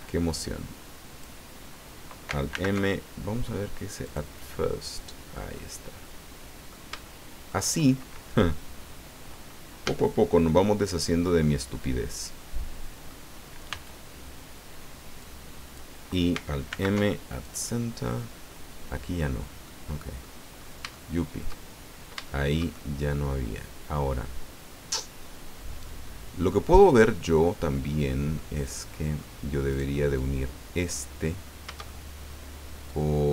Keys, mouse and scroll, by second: 0.3-1.4 drag, 2.5 alt+m, 4.0 click, 5.1-5.4 scroll down 1, 5.6-6.8 middle drag, 7.0 shift+middle click, 9.8 a, 11.4-13.2 drag, 13.7 b, 15.2 click, 16.7 alt+m, 17.4 click, 18.5 click, 19.6 click, 20.6 scroll up 1, 20.9 shift+click, 21.0 shift+middle click, 21.7 shift+scroll up 1, 22.2-28.5 shift+drag, 28.7 click, 29.7 right click, 30.0-31.1 drag, 31.8-33.3 shift+drag.